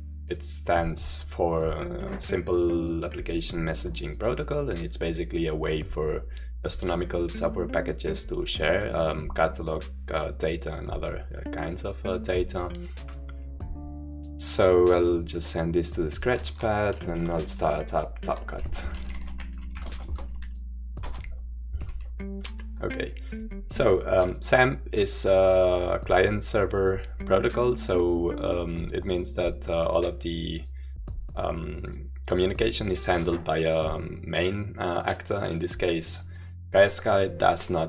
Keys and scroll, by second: 16.4 shift+super+-, 19.4-19.7 typing, 20.7 typing.